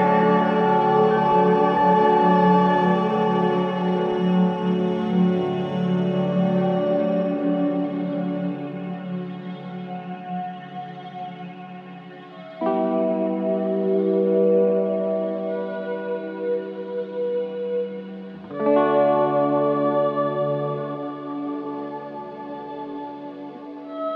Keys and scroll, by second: 0.0 ctrl+d, 5.0 ctrl+j, 10.4 ctrl+shift+i.